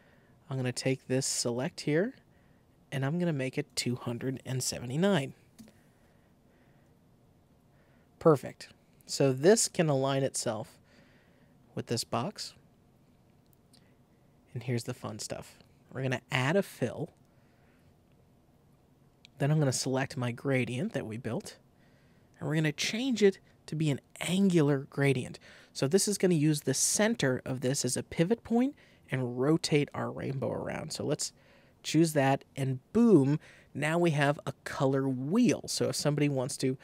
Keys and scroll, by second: 4.8-5.8 typing.